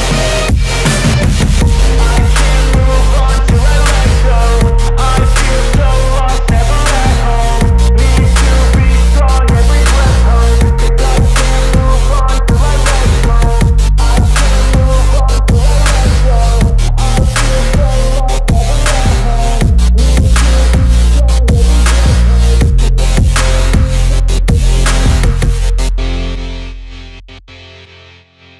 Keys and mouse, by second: 18.0 r, 19.0-20.1 middle drag, 20.1-25.4 drag, 25.4-28.5 middle drag, 28.4 x.